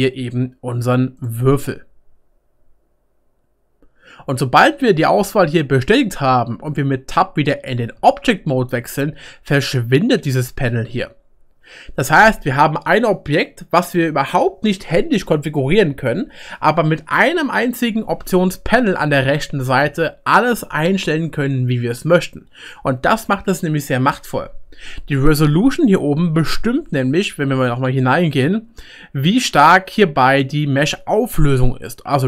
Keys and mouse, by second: 8.0 Tab, 26.2 Tab, 27.3 Tab.